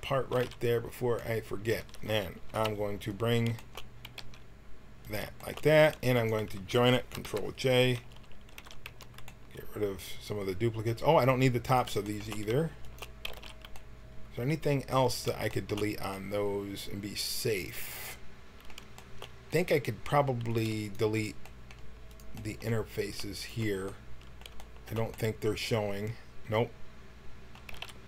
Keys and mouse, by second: 0.2 x, 1.8 Tab, 2.5 KP_1, 4.0 g, 6.2-7.3 drag, 7.3 ctrl+j, 7.6 Tab, 8.0 a, 8.5 w, 8.8 a, 9.2-10.4 middle drag, 11.6-13.2 drag, 13.2 x, 16.5 middle click, 18.9 middle click, 24.0 click, 24.4 middle click, 25.5 middle click, 25.7 middle click, 27.6 x.